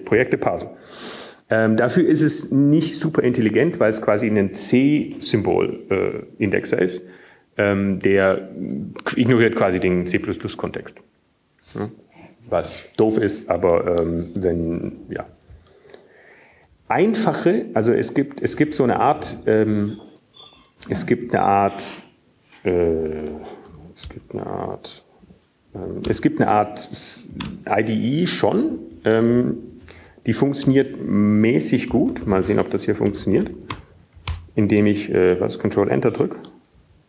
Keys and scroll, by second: 6.0 Down, 7.0 Right, 7.6 Right, 8.1 Right, 18.4 Up, 19.3-21.5 typing, 25.7-26.5 typing, 28.2-29.6 typing, 30.8 typing, 32.9 typing, 33.1 Up, 34.2 Right, 34.2-37.0 typing, 34.7 Return, 35.4 Up, 35.4 Tab.